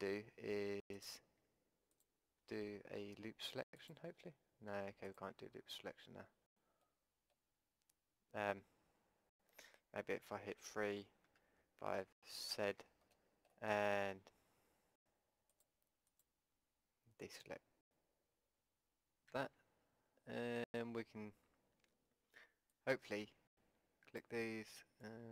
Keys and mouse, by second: 6.8-10.0 middle drag, 10.0 KP_1, 10.6 KP_3, 11.3 KP_5, 12.5 z, 13.1 click, 15.9-18.1 drag, 19.3 a, 22.3 b, 24.5 b.